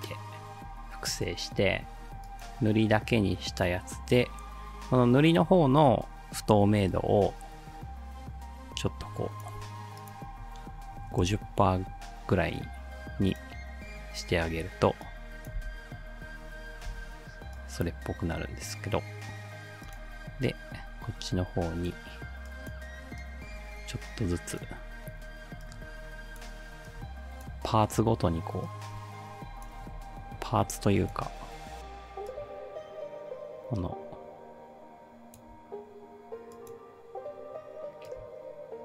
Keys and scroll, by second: 5.8 t, 10.7-11.6 typing, 15.6 space, 16.9 space, 30.0 ctrl+z.